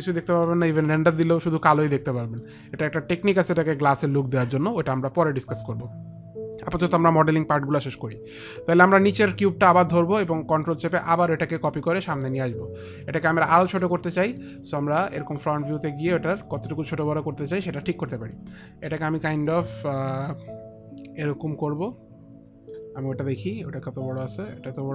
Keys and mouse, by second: 1.2 alt+click, 2.3 alt+middle click, 2.3 alt+click, 9.1 click, 11.2 ctrl+click, 14.8 middle click, 15.4 middle click, 15.4 ctrl+click, 19.6 click, 24.5 click.